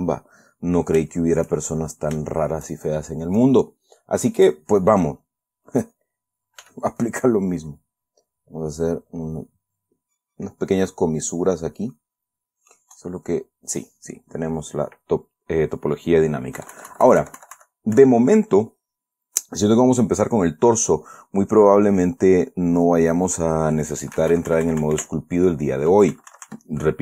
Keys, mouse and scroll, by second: 0.9 middle click, 1.5-2.5 shift+middle drag, 2.6 shift+middle click, 3.7 click, 4.8 click, 7.0 f, 7.3 click, 8.2-12.0 drag, 14.6 middle click, 16.9 KP_Subtract, 22.5 scroll up 2, 22.7 scroll down 2, 23.1 click, 23.7 click, 24.5 KP_Subtract.